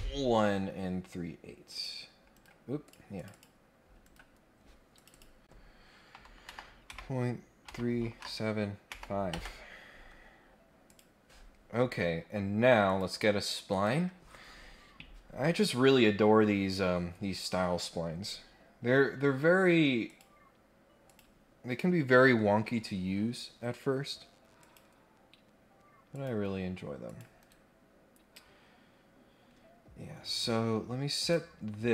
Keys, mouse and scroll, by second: 1.7 click, 2.3 Escape, 2.8 click, 3.2 click, 4.0 Escape, 4.9 click, 10.9 click, 12.8 click, 13.7 click, 18.5 scroll down 1, 18.8-19.7 scroll up 2, 20.0 click, 21.0 click, 22.3 scroll up 1, 22.5 scroll down 2, 24.6 click, 26.1 click, 27.0 click, 27.4 Escape, 29.9 scroll down 1, 30.1-30.6 scroll up 2, 31.1 click.